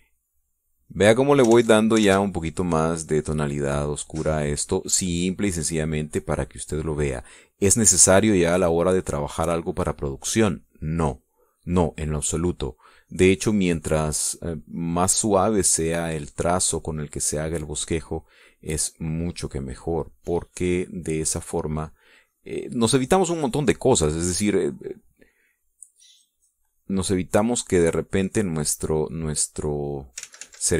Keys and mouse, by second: 0.4 KP_5, 0.8 click, 2.4 click, 3.2 ctrl+z, 4.0-8.8 ctrl+drag, 9.0-11.4 drag, 11.8-13.4 drag, 14.2-20.2 drag, 20.4-30.0 drag, 30.4-30.7 drag.